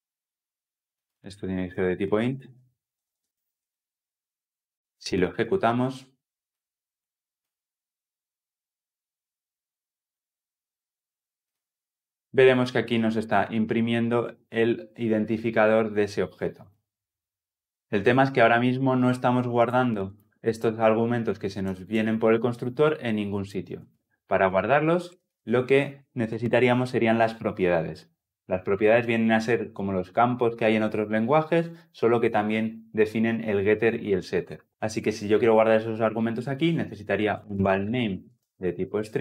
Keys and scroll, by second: 3.3 Escape, 5.2 shift+F10.